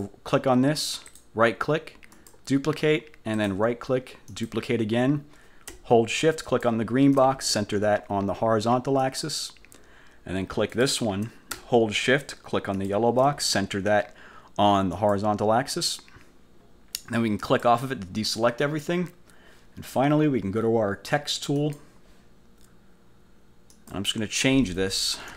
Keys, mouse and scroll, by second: 0.0 click, 1.2 click, 2.2 click, 3.4 click, 4.4 click, 6.6 shift+click, 9.1 click, 10.8 click, 12.8 shift+click, 15.0 click, 17.5 click, 21.7 click, 23.8 click.